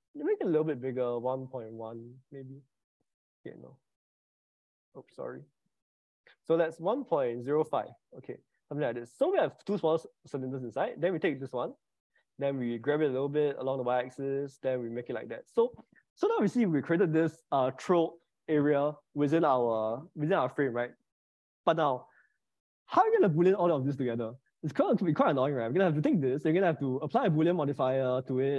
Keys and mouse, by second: 0.2-2.2 drag, 3.7 click, 5.7-8.1 drag, 10.5 click, 10.9 middle click, 12.7 g, 13.5 y, 21.8-22.9 middle drag, 27.5 click.